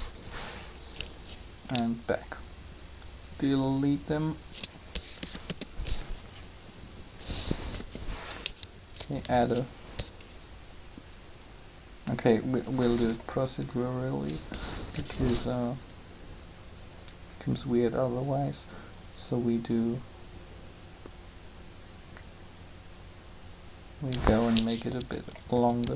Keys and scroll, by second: 4.9 Delete, 5.4 Return, 7.7 3, 14.9 3, 24.7-25.8 typing.